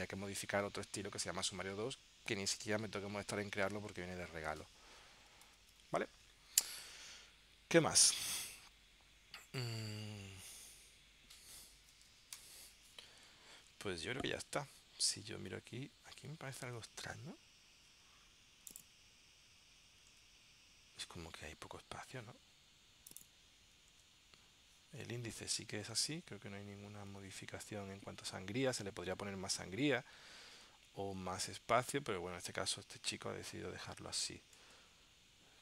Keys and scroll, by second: 5.6 super+z, 12.6 ctrl+alt+super+p, 13.8 super+Tab, 16.8 super+Tab, 20.3 super+Tab, 24.1 super+Tab, 26.0 super+Tab, 27.5 super+Tab, 28.9 super+Tab, 30.7 super+Tab, 32.0 super+Tab, 34.7 super+Tab.